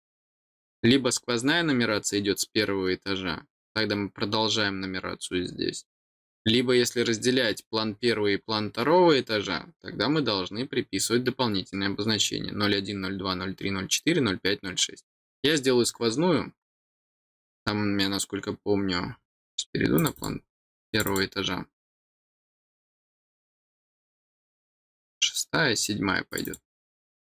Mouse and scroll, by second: 19.9 click, 20.1 click, 20.8 click, 21.0 click, 26.3 click, 26.4 click.